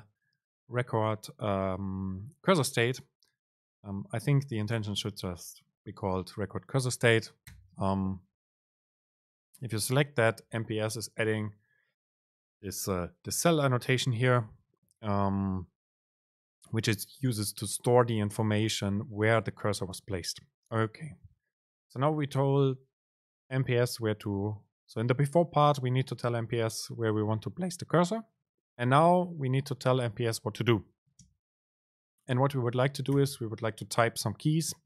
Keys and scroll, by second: 31.4 super+space.